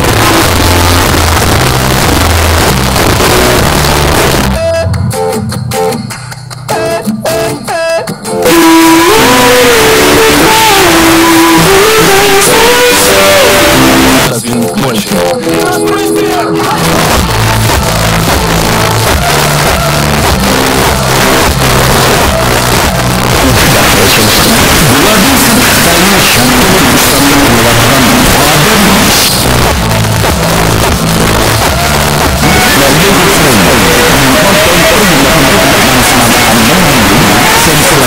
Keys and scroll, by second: 0.0-0.4 typing, 0.6-1.4 Down, 1.5 Down, 1.7 Down, 1.8 Down, 2.0 Down, 2.2 Down, 2.3 Down, 2.4 Down, 2.6 Down, 2.7 Down, 2.9 Down, 3.1 Down, 3.2 Down, 3.4 Down, 3.5 Down, 3.7 Down, 3.8 Down, 4.2 Up, 4.4 Return, 14.2 Page_Down, 29.3 Page_Down.